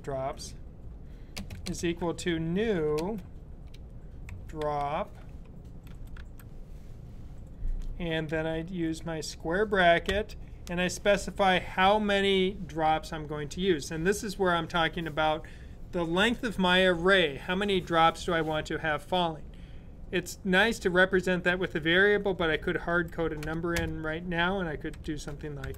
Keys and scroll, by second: 1.4-2.5 typing, 3.9-6.1 typing, 9.8 typing, 22.7-25.5 typing.